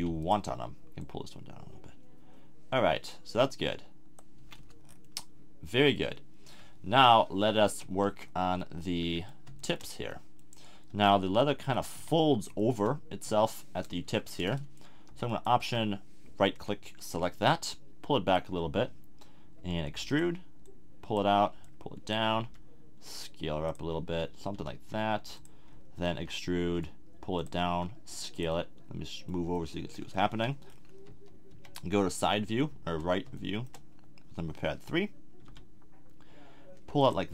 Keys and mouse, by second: 4.4 a, 4.6 Tab, 7.8 KP_1, 8.6 middle drag, 10.9 KP_3, 11.9 KP_1, 14.0 Tab, 18.0 click, 18.7-19.9 drag, 19.9 e, 20.6-23.4 drag, 22.4 s, 23.7-25.4 drag, 24.5 g, 25.8 middle click, 26.2 e, 27.7 s, 31.0 KP_1, 31.5 KP_3, 35.4 g.